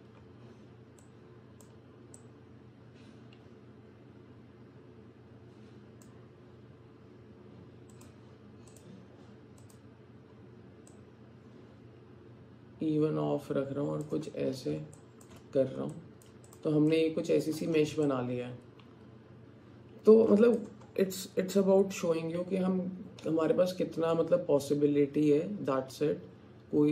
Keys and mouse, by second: 1.1 click, 2.3-6.1 drag, 8.0 click, 8.7 click, 9.6 click, 11.8-14.1 drag, 15.0 alt+shift+right click, 15.9 alt+click, 16.9 alt+click, 18.1-20.6 drag, 23.4 middle click, 24.0-26.9 middle drag.